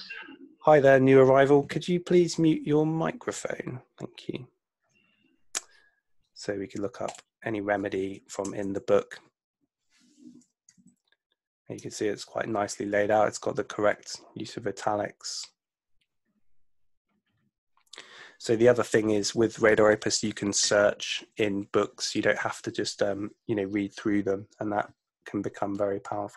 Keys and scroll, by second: 8.5 Return, 10.7 super+F2.